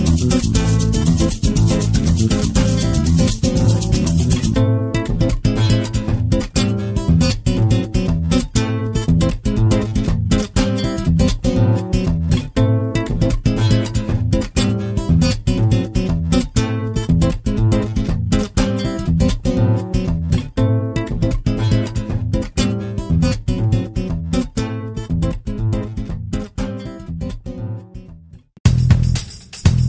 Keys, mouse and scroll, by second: 0.0 click, 2.5-7.4 middle drag, 7.4 click, 8.2-17.1 middle drag, 11.8 shift+scroll down 1, 17.1-18.6 drag, 18.6-25.0 middle drag, 19.9-20.6 scroll up 2, 25.0-26.4 drag, 28.4-29.8 middle drag.